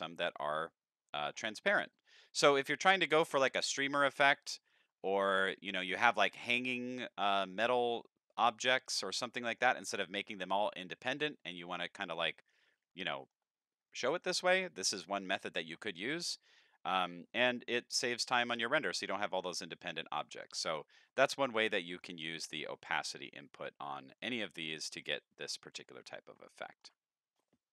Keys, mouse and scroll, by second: 0.2 middle click, 2.5 middle click, 3.2-3.7 middle drag, 4.6-5.8 middle drag, 8.4-8.9 middle drag, 9.2-9.6 shift+middle drag, 11.2 middle drag, 12.3 middle click, 13.1 shift+middle drag, 13.6 middle click, 13.7 scroll up 2, 13.9 middle click, 16.4 middle click, 17.6-18.0 middle drag, 18.3 middle drag, 18.5 scroll down 4, 18.7 middle drag, 19.6 middle click, 19.7-20.2 scroll up 2, 20.0 middle click, 20.4-21.7 middle drag, 22.0-23.4 middle drag, 23.6 middle click, 24.0 middle click, 24.0-24.7 scroll down 1, 24.7 scroll down 3, 25.0 middle click, 25.5 middle click, 26.2 middle click, 26.4 scroll down 1, 26.5 shift+middle click.